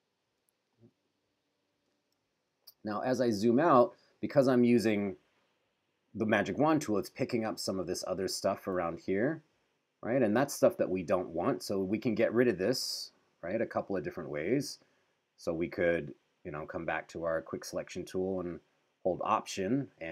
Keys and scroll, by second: 0.7 super+z, 2.4 super+-, 8.7 q, 11.3 q, 13.0 super+=.